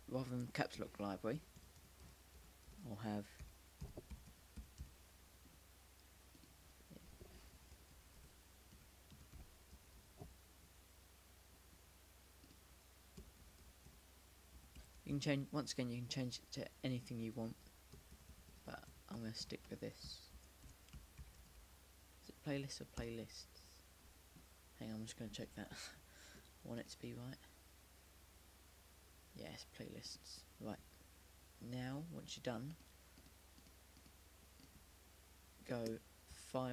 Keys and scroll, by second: 2.3-11.7 typing, 13.0-22.8 typing, 25.9 typing.